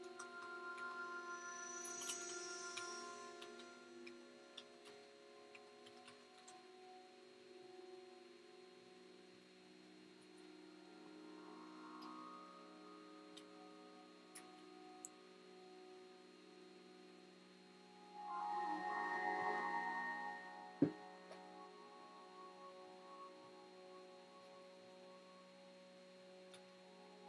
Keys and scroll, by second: 0.0-6.7 typing, 13.0-14.7 typing, 26.2-26.9 typing.